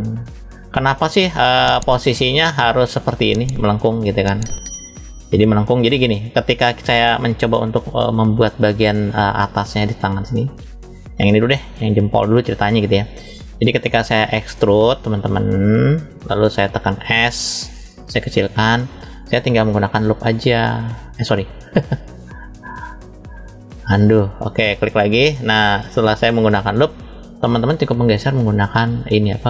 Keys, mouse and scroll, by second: 0.0 click, 0.9 middle click, 2.2 shift+middle click, 3.9-5.8 shift+middle drag, 5.8 scroll up 1, 6.5 middle click, 6.5-6.9 scroll up 1, 7.3 shift+middle click, 8.4 middle click, 9.6 click, 11.6 click, 12.3-13.9 shift+middle drag, 14.5 click, 17.4 s, 18.5 click, 19.5 click, 20.4 click, 23.1 click, 24.7 click, 25.4-26.5 middle drag, 27.1 click, 27.9 middle click.